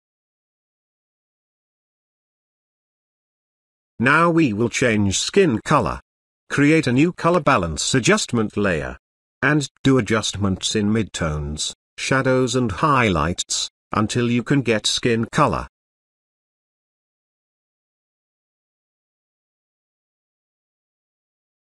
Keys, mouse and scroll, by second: 0.4 click, 5.2 click, 5.2 click, 9.1 click, 15.9-21.6 drag.